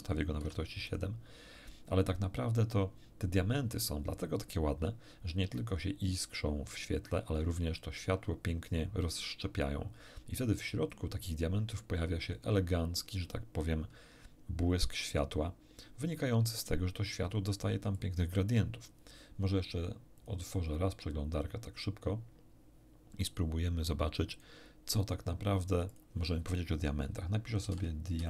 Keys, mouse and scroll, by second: 0.4 7, 0.9 click, 17.9 click, 20.2 click, 24.3 click, 25.9 click, 27.6-28.2 typing.